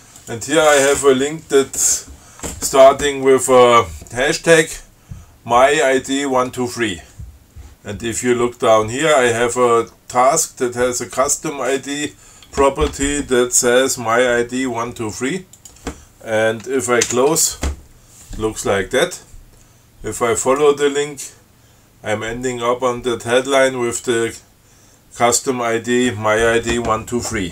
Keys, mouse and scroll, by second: 0.0 click, 0.4 click, 15.8 click, 17.2 alt+9, 20.7 click.